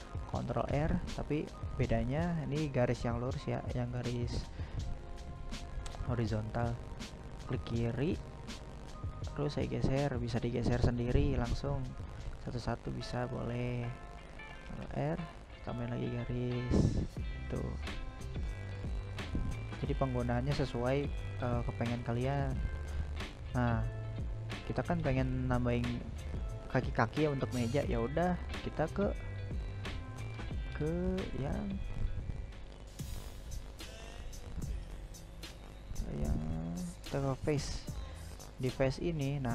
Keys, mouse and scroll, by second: 9.8-10.9 middle drag, 10.9 ctrl+r, 15.8-24.4 middle drag, 24.4 right click, 25.8 right click, 26.7 shift+middle click, 27.5 right click, 28.1 right click, 29.0-30.4 shift+middle drag, 30.4 right click, 31.2-32.4 shift+middle drag, 32.4 right click, 33.4 click, 34.6 right click, 35.2 middle click, 35.9 right click, 36.3 right click, 36.9 shift+middle click, 37.8 right click, 38.5 right click, 39.3 right click.